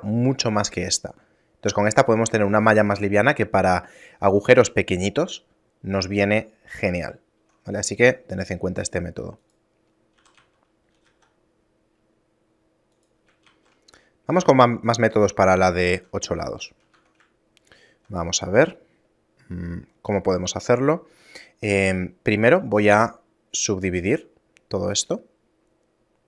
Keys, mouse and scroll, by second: 7.5 Tab, 8.5 right click, 9.5 click, 10.2 a, 10.4 a, 11.0 g, 13.5 shift+a, 15.5 shift+middle click, 16.2 middle click, 16.6 shift+middle click, 17.0 Tab, 17.5 shift+middle click, 22.7 w.